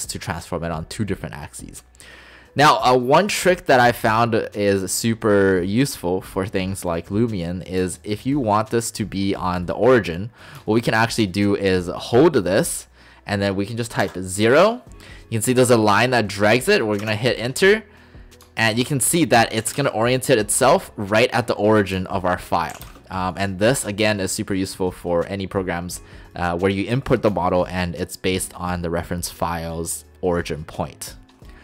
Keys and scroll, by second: 14.1 0, 17.1 Return, 19.6 typing, 22.8 typing.